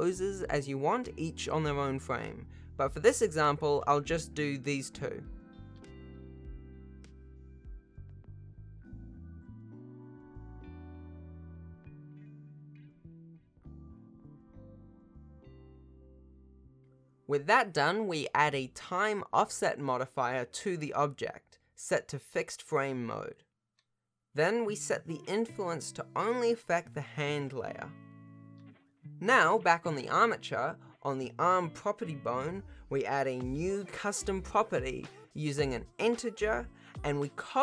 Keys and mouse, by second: 3.3 click, 6.6-8.1 middle drag, 8.6 middle click, 9.6 middle click, 10.3-11.3 middle drag, 11.5-14.4 middle drag, 15.1 middle click, 15.7-17.8 middle drag, 22.2-23.7 drag, 25.4 middle click, 26.1-26.8 middle drag, 30.3-32.5 middle drag, 33.0-33.8 middle drag, 36.1 shift+middle click.